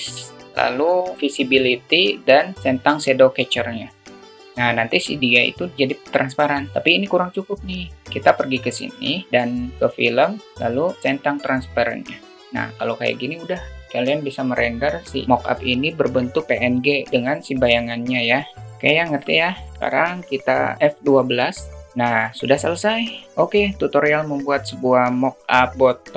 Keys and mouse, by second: 9.3 click, 11.8 click, 12.6 click, 19.0 click.